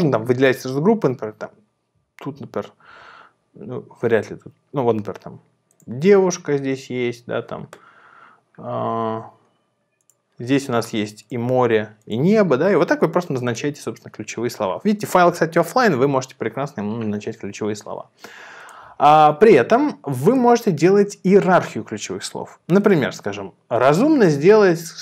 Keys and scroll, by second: 4.1 Down, 6.8 Down.